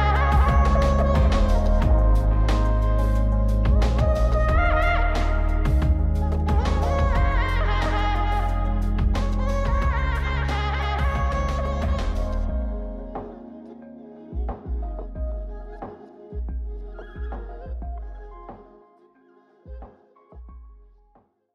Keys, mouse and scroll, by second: 0.5 g, 2.8 g, 6.0 click, 6.7 click, 9.6 click, 20.7 click.